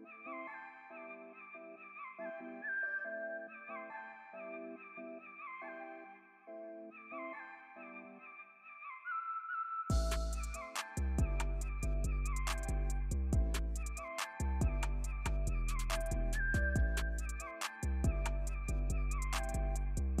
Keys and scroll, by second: 8.2 alt+super+z, 9.9 alt+super+z, 10.3 alt+super+z.